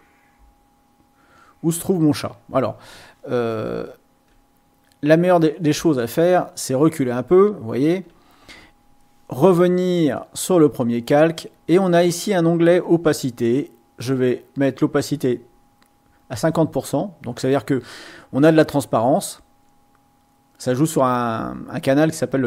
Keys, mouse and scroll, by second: 3.7 ctrl+scroll down 2, 4.7 ctrl+scroll down 3, 5.3 scroll up 2, 5.7-7.0 ctrl+scroll down 6, 7.5-7.9 ctrl+scroll up 4, 10.0 click, 13.5-16.4 drag, 22.3 click.